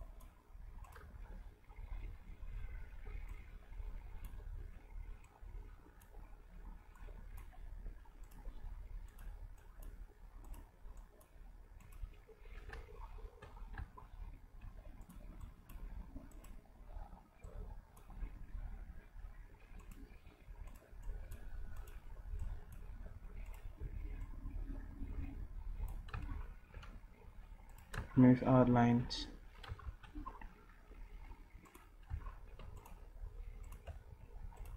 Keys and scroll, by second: 1.1 d, 23.8 d.